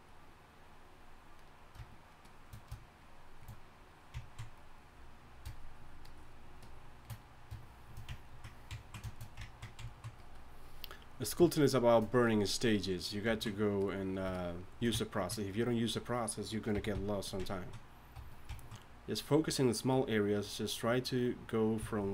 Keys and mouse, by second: 16.9 g, 17.3 f, 18.1 f.